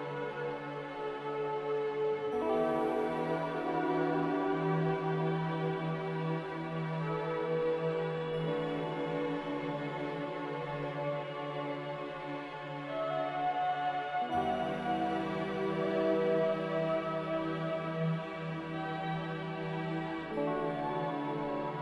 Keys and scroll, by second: 21.2 a.